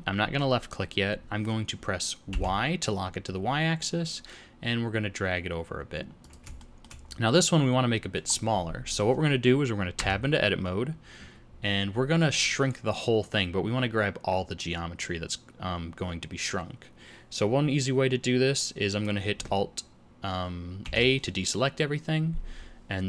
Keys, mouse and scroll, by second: 6.5 shift+middle click, 7.0-8.2 scroll up 2, 8.2 scroll up 1, 9.9 Tab, 20.7 alt+a.